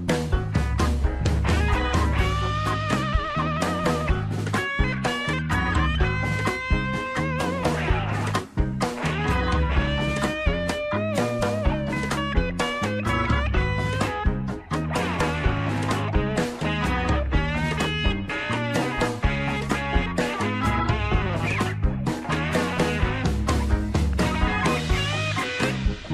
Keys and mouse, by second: 0.1 middle click, 1.1 shift+middle click, 3.1-5.0 drag, 6.0 Tab, 6.3 middle click, 6.7 Tab, 6.9 middle click, 8.5 ctrl+r, 12.6 ctrl+r, 15.9 middle click, 16.9 shift+middle click, 18.2 Tab, 18.9 middle click, 19.7 Tab, 20.3 shift+middle click, 22.0 ctrl+r, 24.8 shift+middle click.